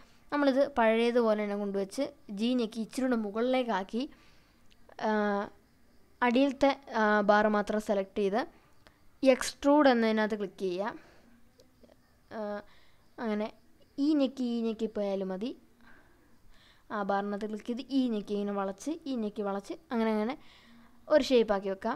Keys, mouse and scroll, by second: 0.4 click, 0.9 click, 1.6 g, 3.3 click, 4.5-4.9 scroll down 2, 4.9-6.1 scroll up 3, 6.1 click, 7.6 e, 10.7 click, 11.2 e, 13.5 click, 14.0 e, 17.2 click, 17.7 e, 20.1 click, 21.0 click.